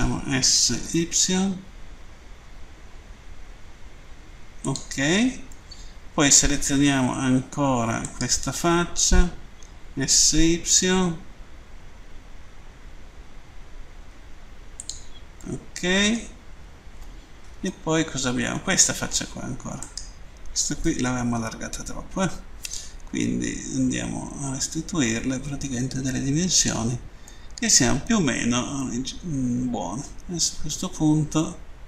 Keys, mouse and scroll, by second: 4.4 click, 5.5 middle click, 8.1 right click, 14.6 click, 15.4 middle click, 17.7 middle click, 19.6 right click, 26.4 click, 27.3 middle click.